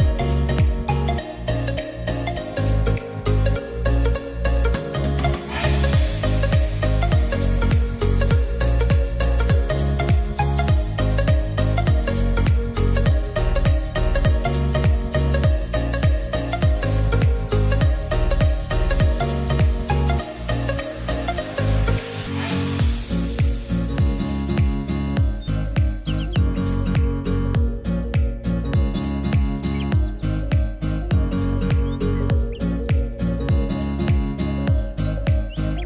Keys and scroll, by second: 3.1 e, 10.3 ctrl+s, 16.8 alt+g, 17.7-19.1 typing.